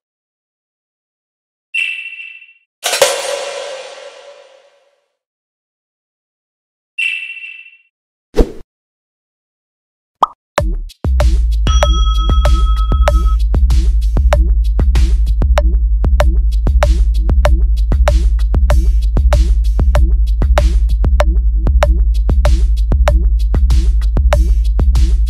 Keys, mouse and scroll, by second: 1.1 shift+click, 1.5 shift+click, 2.0 click, 3.1 shift+click, 3.8 shift+click, 4.6 click, 6.1-6.8 shift+drag, 7.6 click, 9.5 click, 10.4-10.9 shift+drag, 11.4 click, 12.1 shift+middle click, 13.3 click, 15.4-17.2 drag, 18.7 click, 19.2 click, 20.5 click, 21.9 click, 22.5 click, 24.5 click.